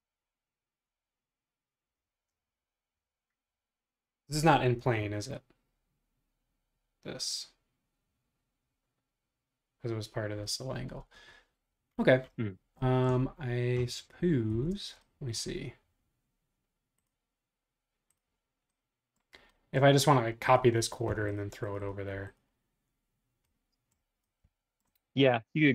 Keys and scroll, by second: 14.5 Escape, 14.7 space.